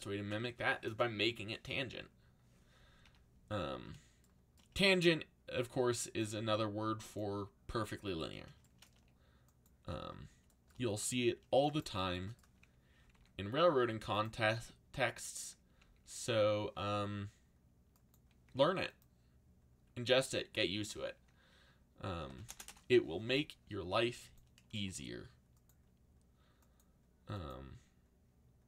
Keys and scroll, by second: 3.0 a, 8.9 a, 12.7-15.0 typing, 15.8 ctrl+z, 18.2-19.1 typing, 21.9-23.0 typing.